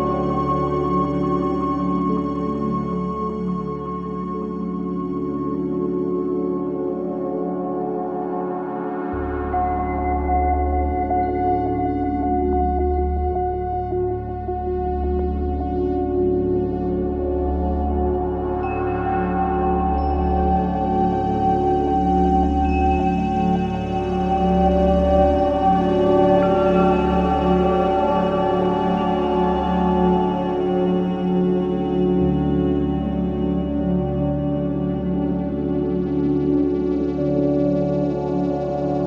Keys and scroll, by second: 14.2 4, 27.7 3, 31.9 4, 32.8 3, 33.9 4.